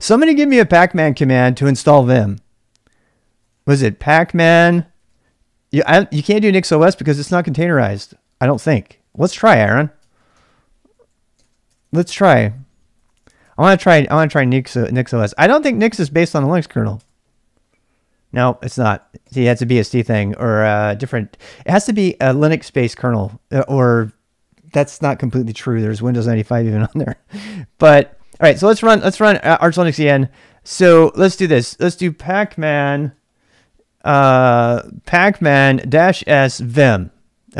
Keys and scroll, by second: 3.2-5.6 typing, 7.7 typing, 8.5 ctrl+c, 8.8-16.9 typing, 10.0 ctrl+[, 17.0 Return, 18.8 ctrl+[, 18.9 k, 19.2 k, 28.5 Return, 31.9-37.5 typing.